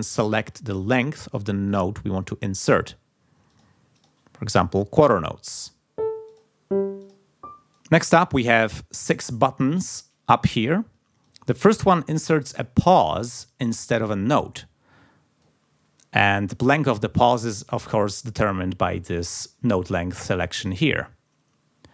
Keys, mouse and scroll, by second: 0.8 click, 1.6 click, 3.4 click, 3.9 click, 5.5 click, 6.2 click, 7.0 click, 7.7 click, 11.2 click.